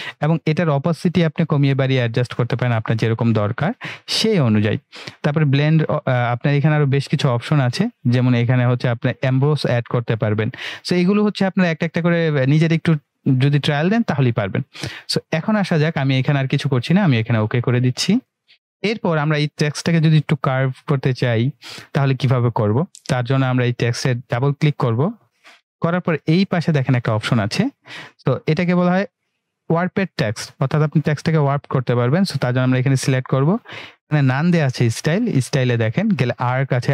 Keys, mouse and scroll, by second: 1.1-4.9 drag, 14.5 click, 18.1 click, 24.3 click, 32.0 click, 35.4 click.